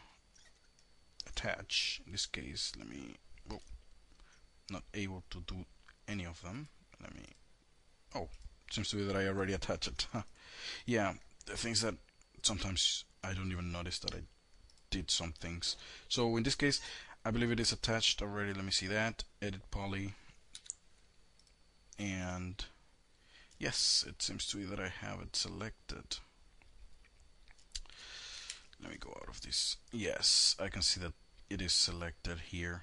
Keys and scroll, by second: 1.5 h, 20.0 5, 27.9 shift+F3.